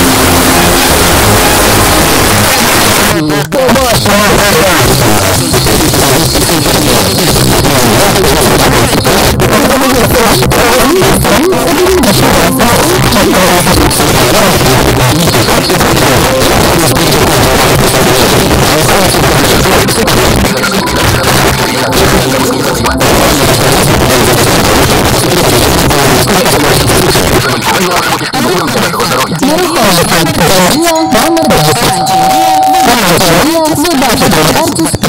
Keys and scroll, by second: 2.0 Page_Down.